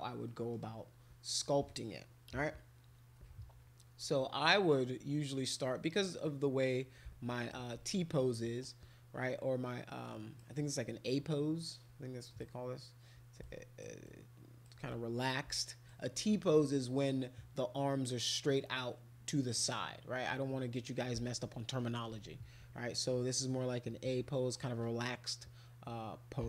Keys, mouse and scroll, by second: 0.3 middle click, 6.2-7.5 right drag, 8.6-10.3 alt+drag, 12.3 click, 13.4 alt+click, 14.0 alt+click, 14.9 click.